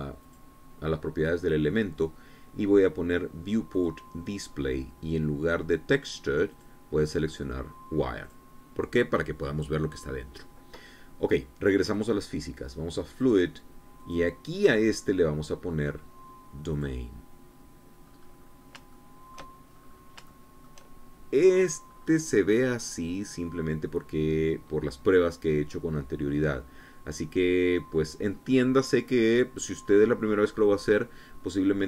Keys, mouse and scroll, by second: 0.9 click, 4.4 click, 5.0-5.9 scroll down 1, 6.0-6.7 scroll down 1, 7.2 click, 8.9 click, 12.5 click, 13.8 click, 14.6 click, 17.4 click, 18.7-19.3 scroll up 2, 19.5 shift+click, 20.4-20.8 shift+scroll up 3, 20.9 shift+middle click, 21.7-22.6 shift+scroll down 1, 22.6-22.9 scroll up 1, 23.1-23.5 scroll down 1, 29.2-29.6 scroll down 1, 30.2-31.1 scroll up 2, 31.1-31.8 scroll down 1.